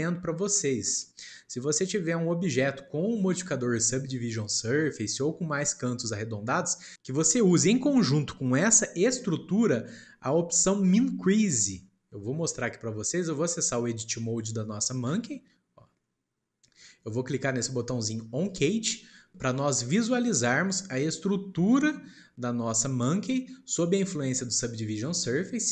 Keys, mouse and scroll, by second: 6.8-9.8 shift+middle drag, 18.5 click.